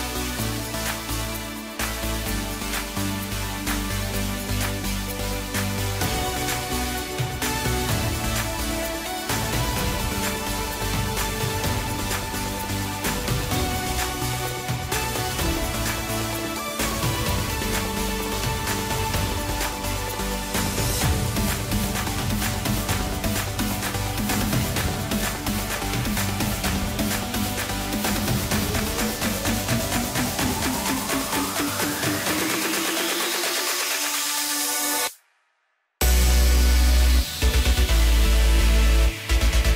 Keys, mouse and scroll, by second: 1.1-2.3 scroll up 1, 2.3 ctrl+r, 7.7 3, 8.4 click, 8.8 shift+drag, 9.3 shift+click, 9.7 shift+click, 10.4 shift+click, 10.8 shift+click, 11.5 shift+click, 11.9 shift+click, 12.6 shift+click, 12.8 shift+click, 14.0 x, 18.3 click, 19.3 click, 20.3 shift+click, 20.9 shift+click, 22.1 shift+click, 22.9 shift+click, 25.4 s, 34.0 click, 34.7 shift+click, 35.6 shift+click, 36.2 shift+click, 37.2 shift+click, 38.3 ctrl+b.